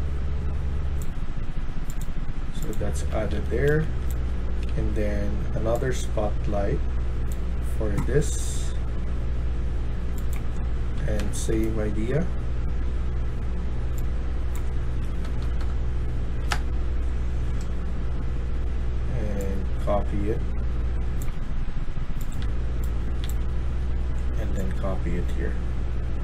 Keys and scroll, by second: 2.5-4.6 typing, 10.7-11.4 typing, 14.7-15.4 typing, 16.3 Return, 22.3 d, 22.9 d, 23.1 d.